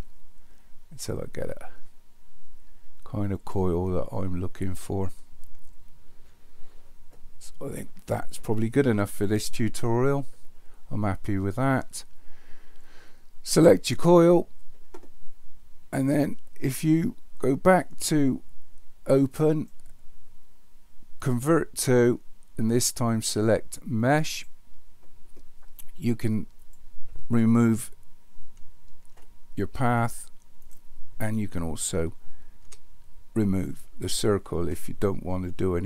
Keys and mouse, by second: 5.3-6.2 shift+middle drag, 13.5 click, 19.4-24.7 drag, 26.6 click, 29.2 Delete, 30.7 drag, 32.6 Delete.